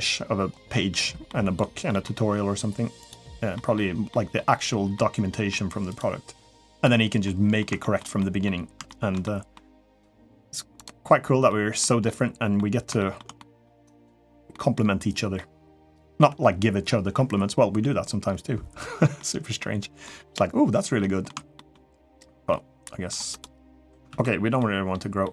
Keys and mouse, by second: 1.1 middle click, 1.6 middle click, 2.8 click, 3.3 middle click, 3.9 middle click, 4.7 middle click, 6.5 click, 7.0 middle click, 7.6 shift+middle click, 8.0 middle click, 8.6 shift+middle click, 9.0 middle click, 10.5 click, 11.2 middle click, 11.8 middle click, 12.8 shift+middle click, 13.1 middle click, 13.7 click, 14.3 middle click, 15.1 middle click, 18.9 middle click, 19.8 middle click, 20.8 middle click, 21.3 shift+middle click, 21.7 middle click, 22.3 middle click, 23.1 click, 24.0 ctrl+z, 24.4 middle click, 25.0 middle click.